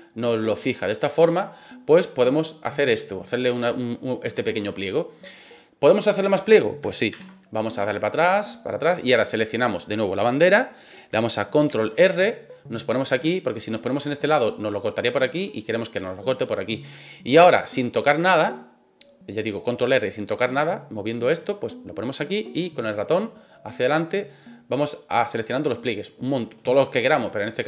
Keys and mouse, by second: 2.0-6.2 drag, 7.1 ctrl+z, 7.8 ctrl+z, 8.4 middle click, 11.6 ctrl+r.